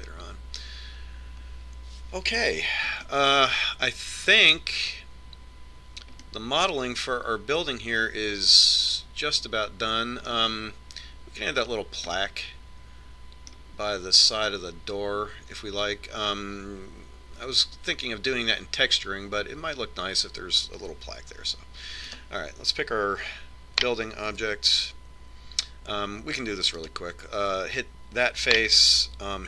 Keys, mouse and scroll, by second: 4.6-6.4 middle drag, 7.8-9.5 middle drag, 9.7 middle click, 13.7-16.5 middle drag, 23.7-25.7 right drag, 26.0 Tab, 28.5-29.4 right drag.